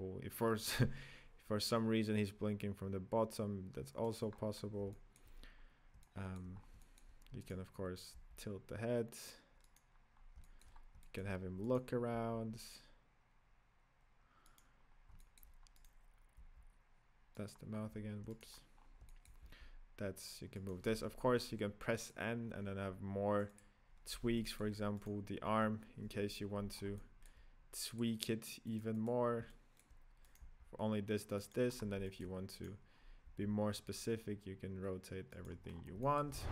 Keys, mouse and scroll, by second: 4.4-4.9 scroll down 4, 4.9-6.5 shift+middle drag, 6.5 scroll down 3, 6.8-7.7 middle drag, 7.7 right click, 8.4 g, 10.2 scroll down 3, 10.4 shift+middle drag, 10.7 scroll up 2, 11.0-11.9 middle drag, 11.9 right click, 12.1 g, 14.9 scroll up 3, 15.2-16.0 shift+middle drag, 16.0 right click, 16.6 g, 17.8 scroll up 2, 18.6 right click, 18.6-19.1 scroll down 5, 19.1-19.7 middle drag, 19.7 g, 21.0 n, 22.0 click, 22.4-23.7 scroll down 4, 23.7 click, 24.4-25.3 shift+middle drag, 25.3 right drag, 26.0 KP_Decimal, 26.7 scroll down 4, 26.9-28.1 middle drag, 28.1 click, 28.9 click, 29.2 click, 29.4-30.5 middle drag, 30.5 right drag, 30.7 g, 31.8 scroll up 6, 32.0-32.7 middle drag, 32.7 right click, 33.0 scroll down 2, 33.2 r, 35.7 scroll down 7, 36.0-36.4 shift+middle drag, 36.4 scroll down 1.